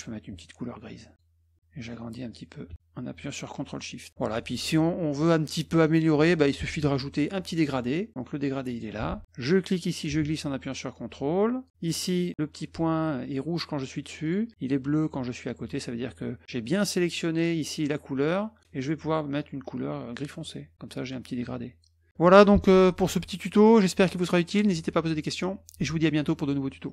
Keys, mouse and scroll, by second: 2.3-4.1 drag, 8.7 click, 9.5-11.7 drag, 12.0 click, 14.2 click, 20.4 click.